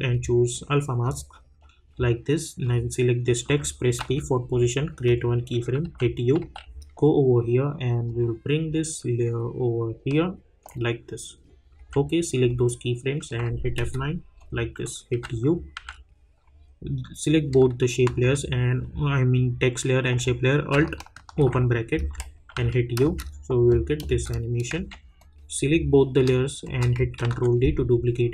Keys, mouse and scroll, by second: 0.1 click, 4.0 p, 5.0 click, 5.8-6.9 typing, 8.0-11.8 drag, 11.8 j, 12.4-13.8 drag, 13.8 F9, 14.3 click, 15.1 u, 15.7 u, 17.3 click, 18.0 shift+click, 21.3 alt+[, 25.4 click, 26.0 click, 26.6 shift+click, 27.2 ctrl+d.